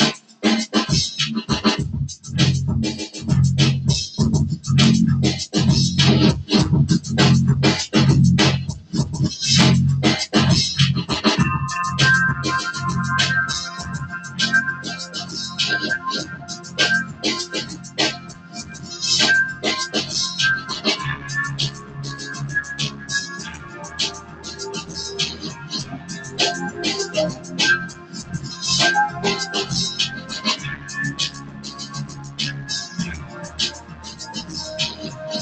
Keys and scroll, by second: 23.0 super+[, 23.7 super+[.